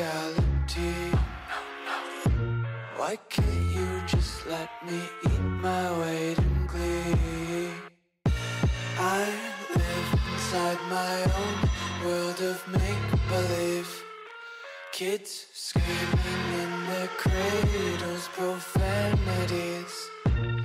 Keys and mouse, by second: 0.1 alt+m, 1.1 e, 1.5 alt+m, 2.2-5.0 typing, 7.1-8.2 typing, 11.4 z, 11.8 a, 12.1 k, 13.5 a, 13.9 k, 15.1 k, 16.4 a, 16.7 k, 17.7 k, 19.0 a, 19.2 w, 19.4 a, 19.8 alt+h, 20.1 a.